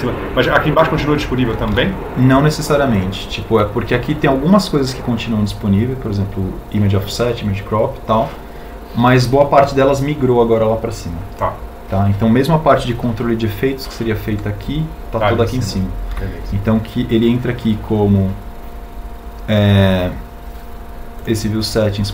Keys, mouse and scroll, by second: 2.6 n, 17.0 n.